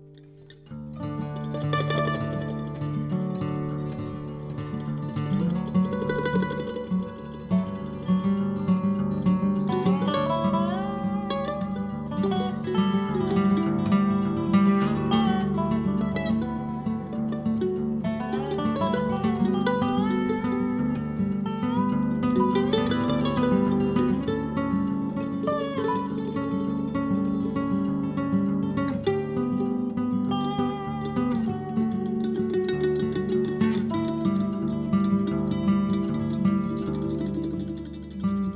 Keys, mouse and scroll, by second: 0.5-1.2 scroll down 6, 1.2 click, 1.8 KP_0, 2.7-4.2 middle drag, 14.1 n, 15.4-16.9 drag, 16.9-17.7 scroll up 1, 17.7 click, 19.1 click, 19.5 click, 19.9 click, 20.5-21.1 scroll up 2, 21.1 click, 24.4 click, 26.0 c.